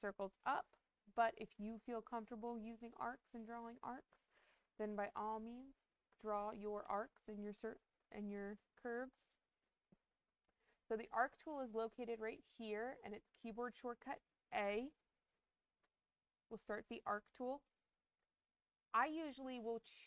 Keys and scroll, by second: 14.4 a.